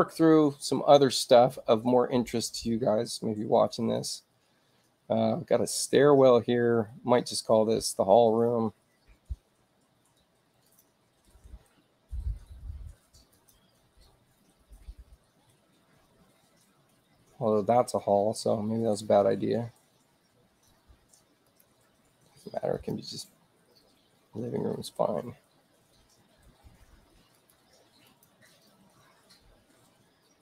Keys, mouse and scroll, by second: 10.6 click, 13.2 click, 21.4 click, 22.7 click, 27.3 click, 28.0 click.